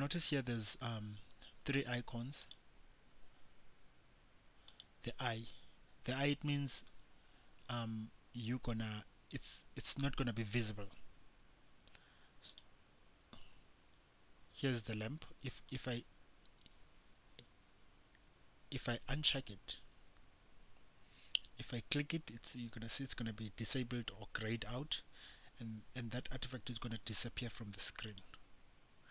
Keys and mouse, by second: 2.7-6.7 drag, 12.7-17.7 drag, 28.3-29.1 drag.